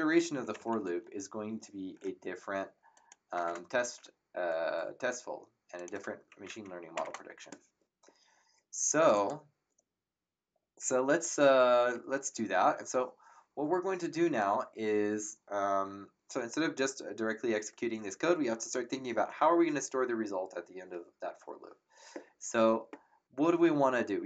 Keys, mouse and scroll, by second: 0.5 Home, 2.9 shift+click, 3.4 Tab, 5.7 click, 9.1 click.